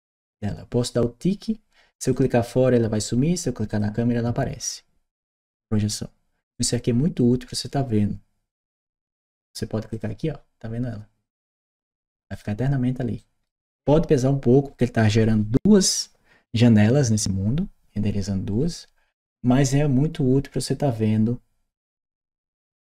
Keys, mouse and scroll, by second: 1.9 click, 3.5 click, 9.7 click, 11.6 right click, 12.1 click, 13.0 right click.